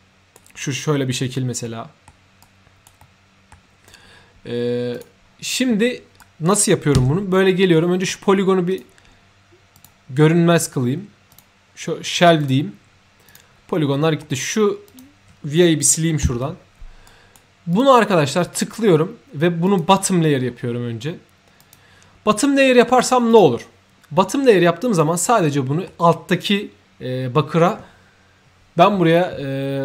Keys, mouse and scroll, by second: 1.1 scroll down 1, 1.6 scroll up 1, 1.7 middle click, 2.4-2.8 right drag, 3.0 middle click, 4.9 click, 5.5 3, 6.2 right click, 6.9-8.6 typing, 7.7 middle click, 8.7 click, 9.7 click, 11.3 click, 12.4 click, 13.3 click, 13.9 middle click, 14.9 click, 17.0-17.3 right drag, 17.7 click, 19.6 click, 20.4-20.8 scroll up 1, 21.6 click, 22.8 middle click, 23.3 click, 25.3 middle click.